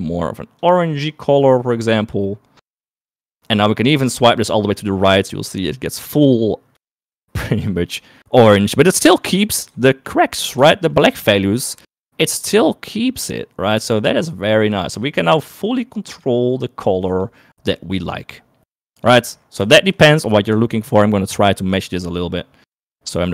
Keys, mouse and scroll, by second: 5.7 click, 7.8 shift+click, 11.1 shift+click, 11.2 middle click, 11.9 shift+middle click, 15.5 click, 21.2 shift+middle click, 22.1 shift+middle click.